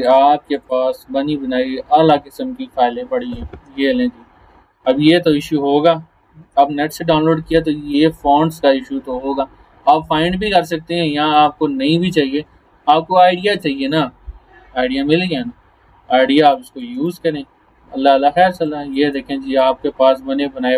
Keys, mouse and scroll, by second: 5.2-5.6 scroll down 1, 7.6 click, 11.3 click, 12.7 alt+scroll up 1, 15.9 alt+scroll up 2, 16.4 space, 16.6 click, 18.0 alt+scroll down 1, 18.5 space, 18.7 click, 19.0 space, 19.6 click, 20.2 alt+scroll down 1.